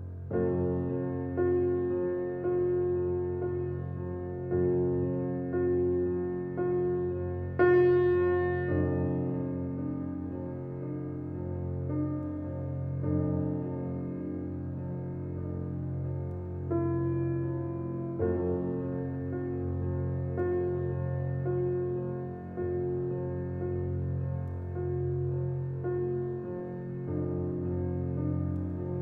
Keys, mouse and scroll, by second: 0.0-0.4 scroll up 1, 0.4 click, 2.8-3.2 shift+scroll down 2, 4.8-5.2 scroll down 1, 5.7 scroll up 1, 6.1 scroll down 1, 7.0-9.1 drag, 9.1-9.6 scroll down 1, 10.1-11.0 typing, 11.3 Return, 11.8 scroll up 1, 12.9 click, 15.5 click, 16.6-17.4 scroll down 1, 17.4-20.0 drag, 21.0 scroll up 1, 21.5-22.1 scroll down 1, 22.1 scroll up 1, 22.4-23.0 scroll down 1, 25.5-26.1 scroll up 1, 26.7 scroll down 1, 28.7 click.